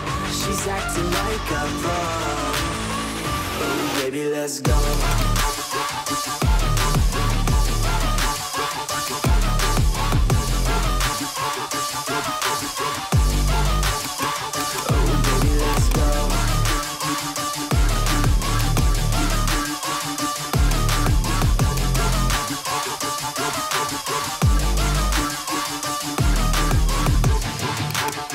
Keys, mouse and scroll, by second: 0.6 click, 0.8-2.6 typing, 3.6-5.0 drag, 9.2 click, 10.8 7, 12.2 3, 14.1 click, 14.8 click, 14.9-15.5 typing, 15.8 click, 18.7 click, 20.0 click, 20.6 click, 22.0 click, 22.5 ctrl+c, 22.8 ctrl+d, 24.8-26.3 scroll.